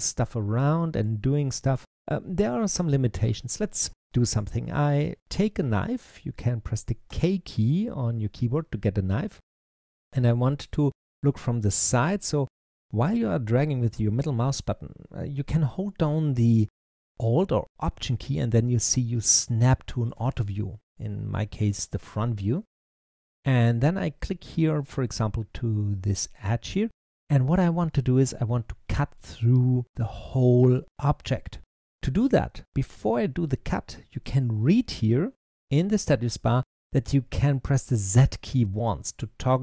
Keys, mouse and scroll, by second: 6.9 k, 9.5-12.5 middle drag, 21.7-22.8 scroll up 2, 22.8-25.8 shift+middle drag.